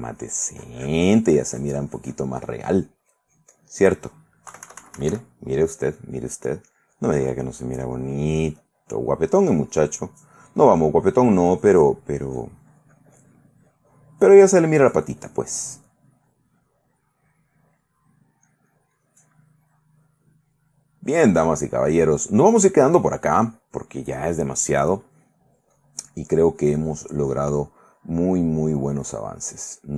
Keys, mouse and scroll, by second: 2.9 click, 4.7 KP_Subtract, 6.4 middle click, 6.9-8.4 drag, 8.4-15.3 drag, 15.4 click, 16.2 click, 16.9 middle click, 17.4 right click, 19.1 click, 19.8 middle click, 22.1 click, 22.9-24.4 drag, 25.0 click, 25.5 click, 26.7-28.9 middle drag, 27.0-28.9 drag, 28.9 middle click, 29.2-29.9 drag.